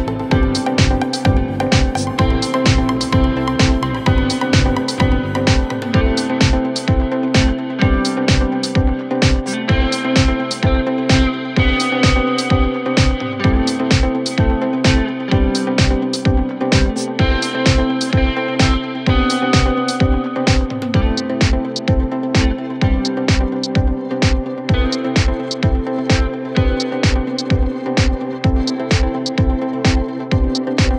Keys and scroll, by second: 1.9 ], 4.7 ], 6.4 ], 8.5 4, 17.5 3, 17.9 ], 19.2 ].